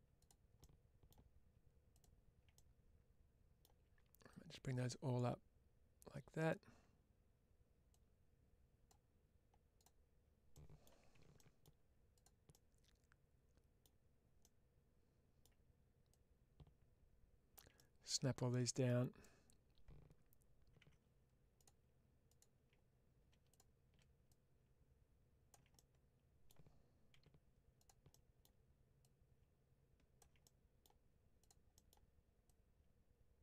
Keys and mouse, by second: 0.1 click, 0.5 middle click, 2.4-3.5 middle drag, 4.2-6.4 drag, 7.8 click, 9.6 click, 10.4 middle click, 11.0 1, 11.2 middle click, 12.0 click, 12.4-13.7 middle drag, 14.3-15.3 middle drag, 16.0-17.4 drag, 17.6-18.7 middle drag, 20.7 2, 23.4 click, 24.1-25.4 drag, 25.6 middle click, 27.0 1, 28.0 middle click, 28.9-30.1 drag, 30.3 middle click, 31.3 click, 31.6 middle click, 32.4-33.4 ctrl+drag.